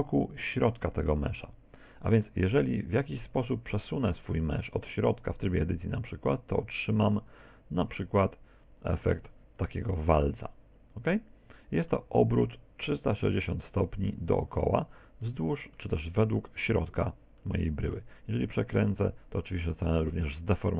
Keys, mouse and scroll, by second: 2.3 middle click, 5.8 click, 9.7 z, 10.1-10.5 scroll down 2, 10.5 middle click, 15.3 middle click, 17.4 middle click, 18.4 r.